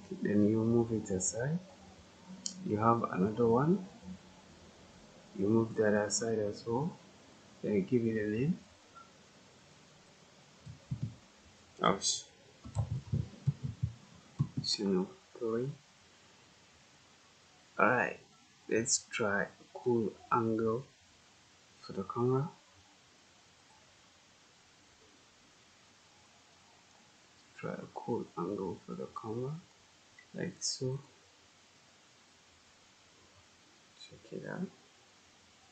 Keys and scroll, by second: 10.8 BackSpace, 12.3-14.3 typing.